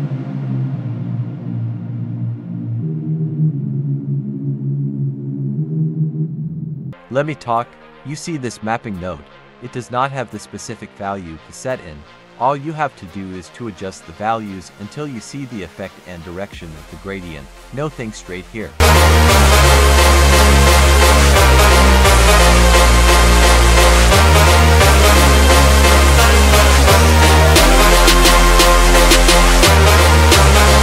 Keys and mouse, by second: 1.7 click, 2.4-4.7 drag, 5.4-6.7 drag, 7.0 click, 7.8-8.9 drag, 9.1-10.3 drag, 10.6 click, 12.0 click, 12.1 click, 12.4 click, 12.7 click, 12.9 click, 13.2 click, 13.4 click, 13.7 click, 14.1 click, 14.4 click, 14.5 click, 15.4 click, 15.6 click, 15.9 click, 16.0 click, 16.2 click, 16.7 click, 16.9 click, 17.0 click, 17.4 click, 17.8 click, 18.2 click, 18.5 click, 19.0 click, 21.3 click, 22.3-22.6 drag, 24.9 click, 25.5 click, 26.6-27.5 drag, 27.7-28.5 drag, 30.1-30.6 drag.